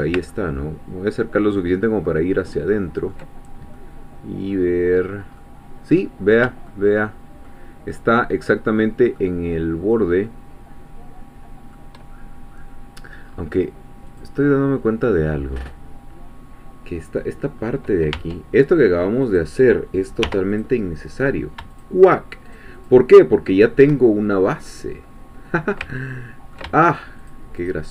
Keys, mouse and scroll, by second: 0.3-3.3 ctrl+middle drag, 3.8-5.1 middle drag, 5.4-6.4 middle drag, 6.7 shift+middle click, 7.9-11.9 shift+middle drag, 12.1-12.5 shift+scroll down 1, 12.7 scroll down 1, 13.3-13.6 scroll up 1, 14.2-16.9 drag, 16.9-17.6 scroll down 1, 17.6-17.9 scroll up 1, 18.1 Tab, 19.4 click, 20.2 3, 20.6 click, 21.7 shift+click, 22.5 shift+click, 23.1 shift+middle click, 23.8 shift+scroll up 1, 24.0 shift+scroll down 1, 24.5-27.1 middle drag, 27.3 shift+click.